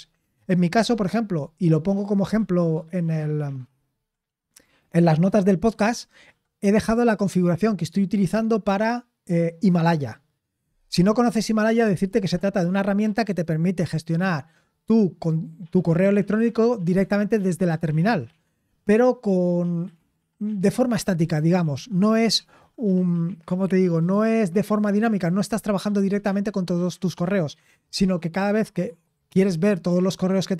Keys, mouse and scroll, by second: 2.6-3.9 scroll down 5, 3.9 scroll down 3.